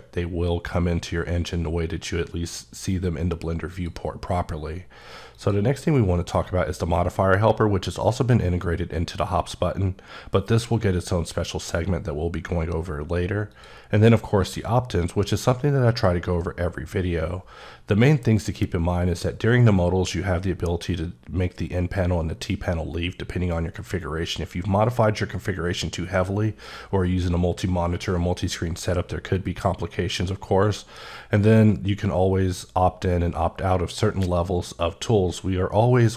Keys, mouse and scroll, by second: 5.2 click, 13.4 click, 36.0 click.